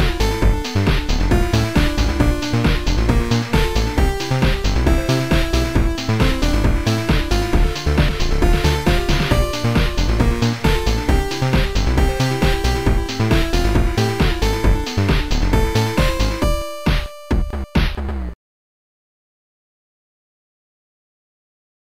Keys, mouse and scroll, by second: 3.5 ctrl+z, 3.5 click, 11.1 click, 15.6 click, 17.4 click.